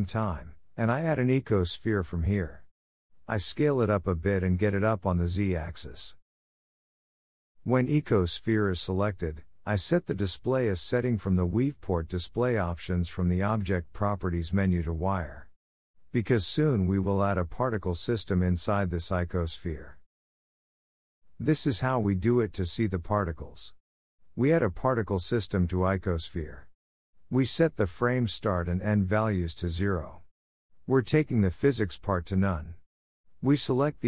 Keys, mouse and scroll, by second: 2.1 s, 3.6 g, 8.9 click, 10.1-12.3 drag, 12.8 click, 16.3-18.2 drag, 19.4 click, 22.2 click, 23.2-29.7 drag, 32.4-34.0 drag.